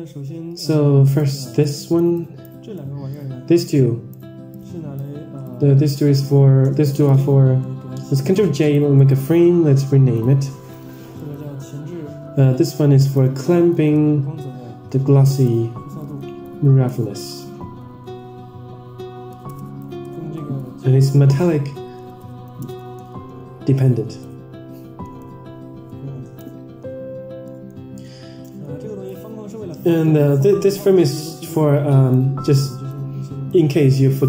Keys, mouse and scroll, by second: 0.5-1.1 drag, 1.5 click, 2.0 drag, 2.6-3.0 drag, 3.6-4.0 drag, 4.4-4.9 drag, 5.3-5.8 drag, 6.9 ctrl+j, 8.9-26.7 right drag, 27.4 middle click, 28.4 middle click, 29.0-29.8 drag, 30.1 middle click, 31.3 click, 33.0-33.5 drag.